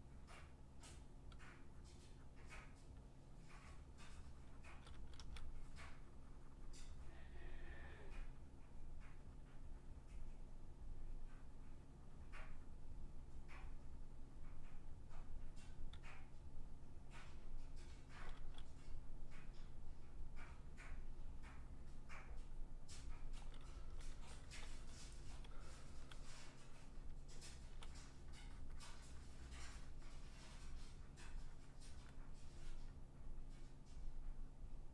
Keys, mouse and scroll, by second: 0.2 click, 0.8 click, 1.0 click, 1.6 click, 1.9 click, 2.3 click, 3.1 click, 3.4 click, 3.6 click, 3.8 click, 4.0 click, 4.3 click, 4.4 click, 4.6 click, 4.7 [, 5.0 [, 5.2 [, 5.5 click, 5.8 click, 5.9 click, 6.1 click, 6.3 click, 6.5 click, 6.7 click, 6.9 click, 7.1 click, 7.2 click, 7.8 click, 8.1 click, 8.3 click, 8.5 click, 8.6 click, 9.2 click, 9.6 click, 9.9 click, 10.1 click, 10.3 click, 10.7 click, 14.6 click, 14.8 click, 15.0 click, 15.8 click, 16.0 click, 16.2 click, 16.8 click, 17.0 click, 17.1 click, 17.3 click, 17.6 click, 17.7 click, 17.9 [, 18.4 [, 18.9 click, 19.2 click, 19.4 click, 19.7 click, 20.3 click, 20.6 click, 20.8 click, 21.1 click, 21.2 click, 21.5 click, 21.7 click, 21.9 click, 22.1 click, 22.3 click, 22.5 click, 22.8 click, 23.4-27.8 typing, 24.4 click, 24.6 click, 26.5 click, 26.9 click, 27.1 click, 27.9 click, 28.2 click, 28.4 click, 28.6 click, 28.9 click, 29.1 click, 29.3 click, 29.5 click, 29.7 click, 29.9 click, 30.1 click, 30.4 click, 31.0 click, 31.1 click, 32.0 click, 32.7 click, 33.8 click.